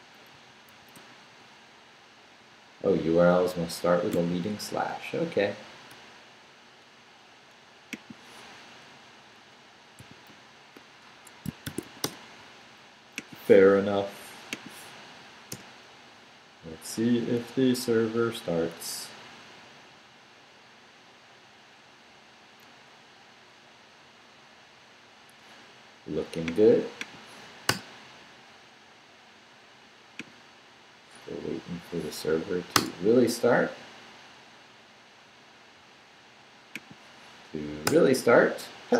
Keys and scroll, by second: 0.1-1.4 typing, 4.1 /, 8.9 Left, 10.0 i, 10.3 /, 11.1 Escape, 11.4-12.3 typing, 15.1 Up, 15.5 Return, 27.7 Return, 32.7 Return, 37.8 Return.